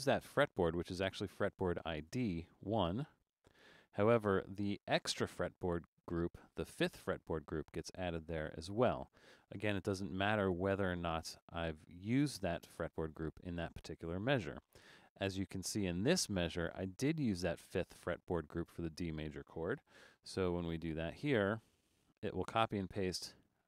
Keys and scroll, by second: 2.8 Return, 10.6 super+z, 19.7 super+c, 22.7 super+v.